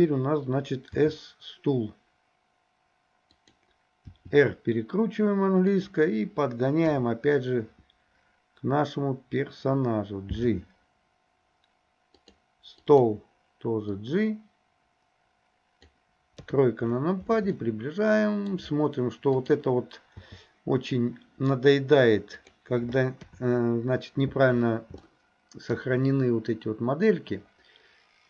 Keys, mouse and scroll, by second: 1.0 s, 4.1 r, 6.9 KP_7, 10.5 g, 14.0-15.9 drag, 16.4 KP_3, 17.6-19.4 shift+middle drag, 19.4 click, 20.2 g, 23.3 KP_7, 25.1 shift+middle click.